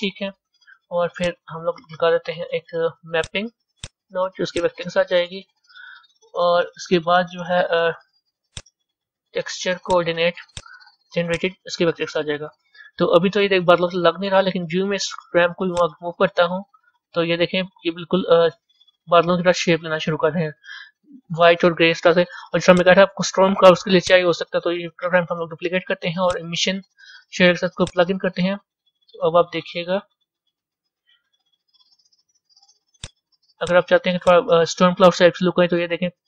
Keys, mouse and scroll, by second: 5.2 click, 7.3-12.3 middle drag, 12.3 click, 14.4-15.7 middle drag, 15.7-18.0 drag, 18.0-18.7 scroll up 4, 19.0-22.6 middle drag, 22.6 click, 23.9 click, 24.9 shift+d, 28.5-30.8 drag, 33.6-36.2 drag.